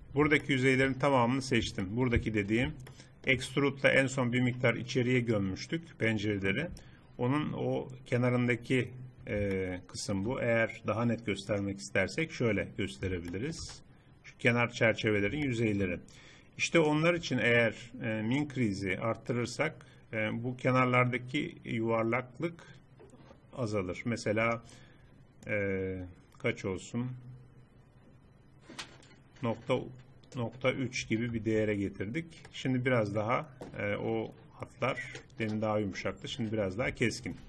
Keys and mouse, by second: 4.4 click, 6.6-11.6 middle drag, 12.4 click, 13.0 middle click, 16.8-20.2 drag, 25.5-27.5 drag, 31.4 Tab, 36.1 middle click.